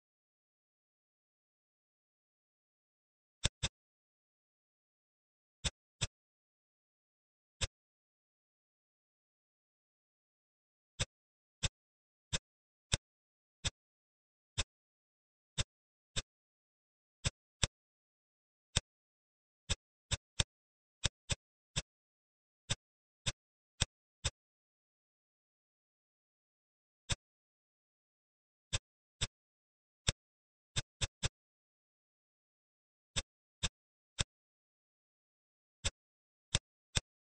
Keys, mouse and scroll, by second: 3.0 Tab, 3.3 click, 3.5-5.0 middle drag, 5.2-5.5 scroll down 1, 5.5-5.8 middle drag, 5.8 click, 6.3-7.5 scroll up 3, 7.5-8.8 drag, 8.8-9.7 scroll up 2, 9.7 Tab, 10.9 click, 11.5 click, 13.7 click, 14.5 click, 15.5 click, 16.0 click, 17.1 shift+click, 17.4 middle click, 18.1-18.6 scroll down 2, 18.6-19.6 middle drag, 19.9 shift+click, 20.3 middle click, 21.2 shift+click, 21.6 middle click, 22.2 scroll down 1, 22.6 middle click, 23.1 shift+click, 23.7 shift+click, 24.1 shift+click, 25.8 e, 27.2 ctrl+z, 28.6-29.4 drag, 29.4-29.9 scroll down 2, 29.9 click, 33.1 click, 34.0-35.3 middle drag, 35.3-35.7 scroll up 1, 35.7 click, 36.4 click.